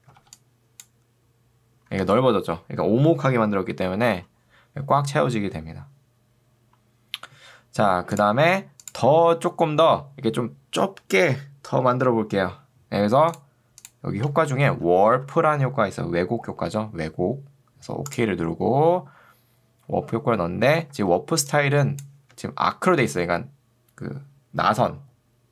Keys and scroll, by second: 0.3 ctrl+2, 1.9 Escape, 14.5-15.6 typing, 21.1 ctrl+2, 22.3 Escape.